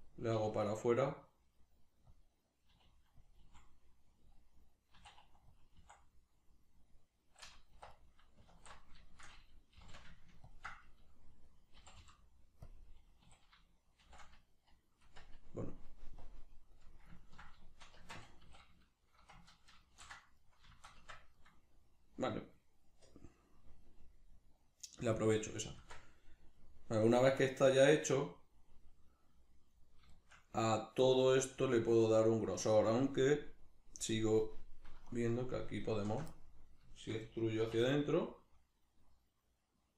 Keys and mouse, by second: 0.3 e, 2.2 click, 2.7 e, 3.3 click, 3.4 s, 4.3 click, 4.9 e, 5.6 click, 5.7 s, 6.5 click, 6.9-7.9 middle drag, 7.7 1, 7.9 right click, 8.5 alt+q, 9.1-10.5 shift+middle drag, 9.8 g, 10.5 ctrl+click, 10.8-12.7 middle drag, 11.8 g, 12.7 click, 12.8-16.2 middle drag, 13.3 a, 14.0 shift+n, 15.1 Tab, 16.2-17.2 drag, 17.2-33.7 ctrl+middle drag, 18.0 Tab, 19.9 ctrl+shift+n, 21.0 Tab, 25.8 Tab, 33.7-35.1 drag, 35.1 alt+right click, 35.8 alt+shift+right click, 36.3-39.9 middle drag, 37.6 e.